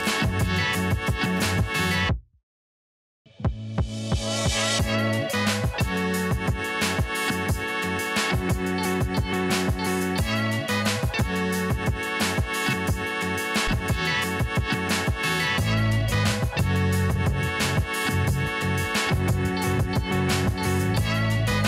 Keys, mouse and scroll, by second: 1.9 click, 2.3 alt+scroll down 1, 2.9 click, 3.2 alt+scroll down 1, 3.9 click, 4.0 alt+scroll down 1, 4.3 alt+scroll up 1, 5.3-5.6 scroll down 1, 5.6 click, 11.4 scroll up 1, 11.7 alt+scroll down 1, 12.3-12.8 scroll up 1, 13.3 click, 15.5 shift+click, 17.3 ctrl+t, 18.3-20.5 alt+drag, 21.3 right click.